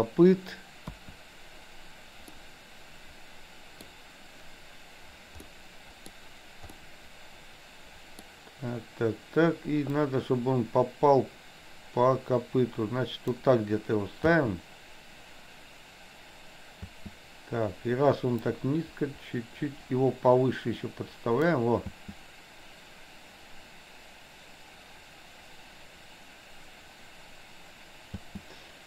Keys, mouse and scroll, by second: 0.9 KP_1, 2.4-3.9 middle drag, 5.4-6.3 middle drag, 6.8-8.3 middle drag, 9.9 click, 10.2-13.4 drag, 14.3 space, 16.9 space, 18.4 click, 18.9-21.6 drag, 21.9 space, 28.2 space.